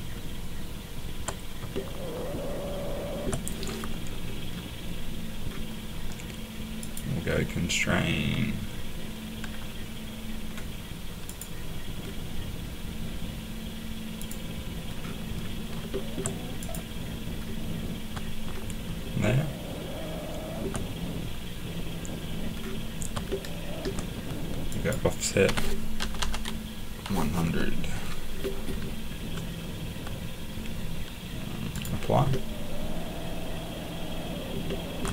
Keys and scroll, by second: 25.4-26.5 typing.